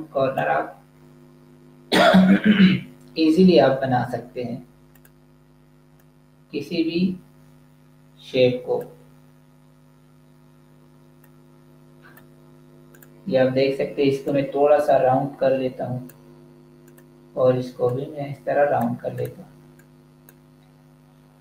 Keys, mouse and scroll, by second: 4.8 click, 11.0 click.